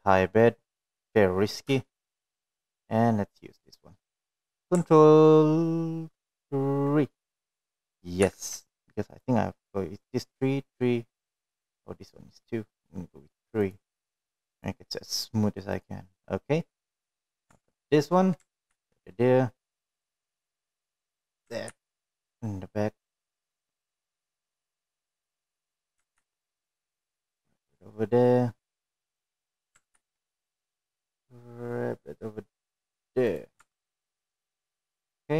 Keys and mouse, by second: 0.4-2.8 middle drag, 3.2-3.5 middle drag, 4.2 shift+middle click, 5.1 click, 10.7 ctrl+3, 11.5 click, 16.0 click, 17.0 click, 20.1 Tab, 21.1 ctrl+r, 24.1 ctrl+r, 27.2-28.4 middle drag, 28.6 ctrl+r, 31.8 middle click, 32.4 ctrl+r.